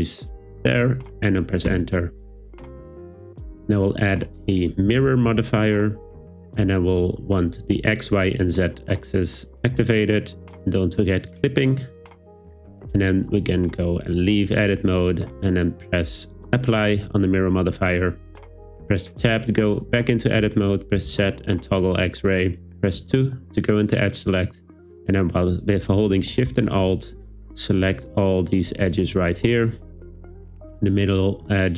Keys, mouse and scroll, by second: 0.7 click, 1.7 Return, 4.0-5.6 drag, 5.3 r, 8.1 click, 8.5 click, 11.2 click, 12.1 Tab, 16.4-17.1 drag, 19.2 Tab, 21.0 z, 23.0 2, 27.9 alt+shift+click, 28.5 alt+shift+click, 30.8 alt+shift+click, 31.6 alt+shift+click.